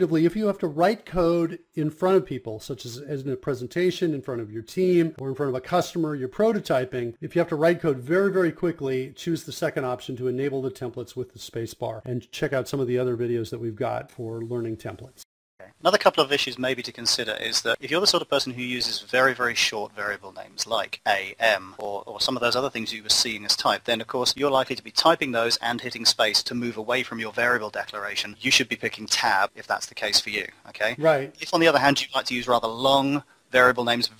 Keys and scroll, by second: 0.0-2.9 typing, 4.2-9.2 typing, 10.6 Return, 10.9 ;, 12.0 Down, 12.0 Return, 12.5 r, 13.1 space, 14.0 Return, 14.4 End, 14.9 Down, 15.2 Return, 15.3 Up, 15.5 Up, 15.8 Down, 16.0 Down, 16.7 Up, 17.0 Down, 17.2-21.7 typing, 23.7-26.8 typing, 27.8-34.1 typing.